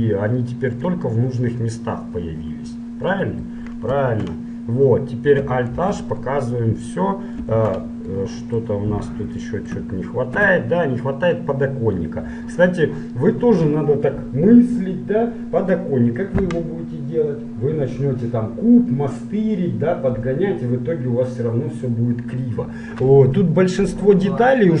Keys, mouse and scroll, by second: 1.4-3.0 middle drag, 4.1 KP_1, 5.8 alt+h, 6.5-7.8 middle drag, 7.6 KP_1, 8.3 middle click, 9.6 middle click, 10.4 a, 11.2-15.6 middle drag, 23.7-24.8 middle drag.